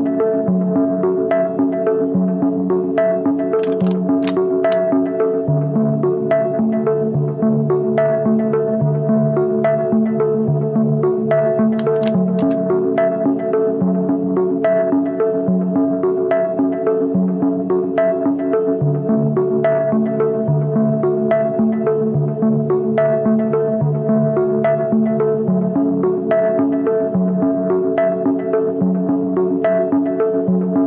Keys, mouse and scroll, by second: 6.5 scroll down 1, 10.3 ctrl+t, 11.7 alt+shift+click, 12.5 ctrl+=, 12.6 ctrl+=, 12.9 space, 13.7 space, 15.0 alt+shift+click, 17.0 alt+shift+click, 18.4 Return, 19.6 alt+scroll down 1, 19.6 space, 20.3 alt+scroll down 1, 20.5 alt+scroll up 1, 24.5 ctrl+t, 25.0 alt+shift+click, 26.3 Left, 26.3 Left, 26.7 Left, 26.8 Left, 27.0 Return.